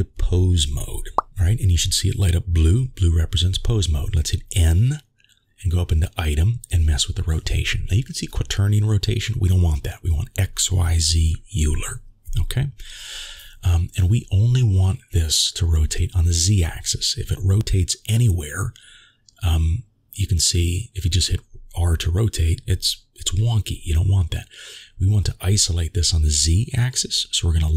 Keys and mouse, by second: 0.6 click, 1.5-2.7 middle drag, 3.7 n, 5.3 click, 7.8-11.5 drag, 15.6-19.6 drag, 20.4 ctrl+z, 21.8 r, 24.8 ctrl+z, 25.2 click.